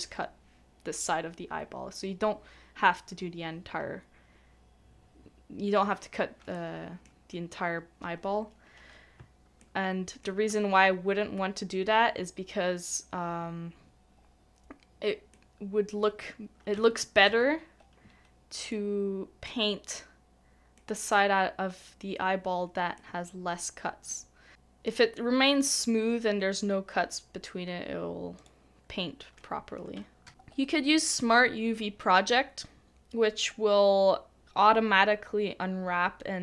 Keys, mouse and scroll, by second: 6.5 middle click, 9.1 middle click, 9.6 shift+middle click, 15.3 middle click, 16.7 Tab, 17.3 Tab, 20.7 Tab, 29.9 middle click, 30.3 ctrl+e, 30.3 typing.